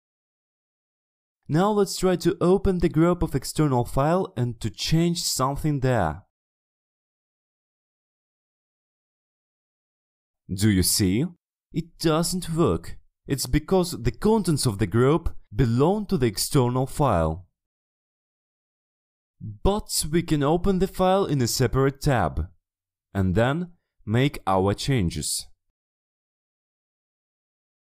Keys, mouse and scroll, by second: 1.7 click, 3.0 click, 4.5-5.7 scroll down 1, 5.7 click, 7.9-8.3 ctrl+scroll up 2, 8.7 ctrl+middle click, 9.8 click, 11.6-13.0 drag, 13.7 click, 14.6 click, 16.0 click, 17.0 click, 18.0 click, 18.6 ctrl+middle click, 18.8-19.5 ctrl+scroll down 3, 21.2 click, 21.9 click, 22.8 click, 23.5 click, 24.3 click, 24.7 click, 25.0 click, 26.1-26.5 ctrl+scroll up 2, 26.5 middle click, 27.5 click, 27.8 middle click.